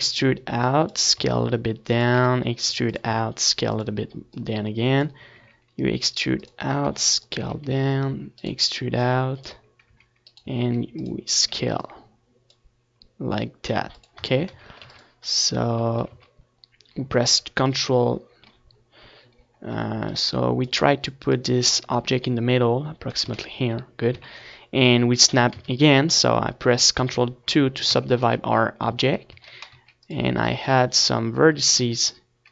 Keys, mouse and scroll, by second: 0.0-2.0 right drag, 1.8 e, 2.2-3.9 right drag, 2.7-7.8 drag, 3.3 s, 4.3 e, 5.3 s, 7.4 e, 8.4-12.6 drag, 8.6 s, 9.4 e, 10.5-12.0 right drag, 11.8 e, 12.3 right click, 12.3 s, 12.8-15.2 drag, 12.9-14.0 right drag, 14.6 s, 15.8-17.3 drag, 15.9 Tab, 16.2 z, 16.5 ctrl+s, 17.8 z, 18.8 shift+c, 21.7-24.7 drag, 24.7 z, 25.6 z, 26.4 Tab, 26.7 a, 27.0 a, 28.4 ctrl+2, 29.3 Tab, 29.6 z, 30.2 Tab, 30.7 a, 31.1 ctrl+r, 31.6-32.5 drag, 32.4 a.